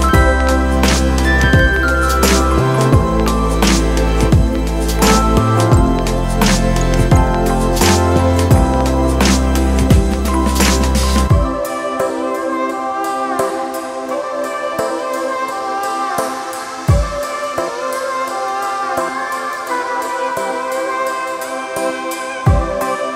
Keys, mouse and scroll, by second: 13.5 ctrl+t, 14.6 alt+shift+click.